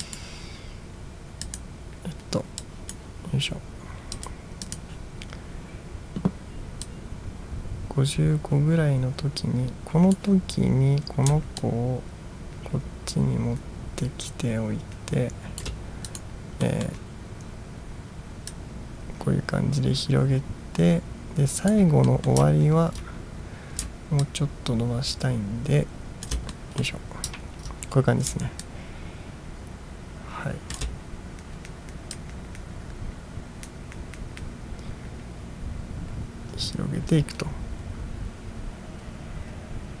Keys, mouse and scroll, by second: 0.1 click, 1.5 click, 2.8 drag, 4.2 click, 4.7 click, 6.9 click, 7.6 drag, 8.0-10.2 drag, 11.6-15.7 shift+drag, 16.1 click, 16.7 middle drag, 18.6-21.8 drag, 22.1 middle drag, 22.6 ctrl+scroll down 1, 24.3-26.3 shift+drag, 26.6 middle drag, 27.5 ctrl+scroll down 1, 28.7-30.9 shift+drag, 32.2-40.0 drag.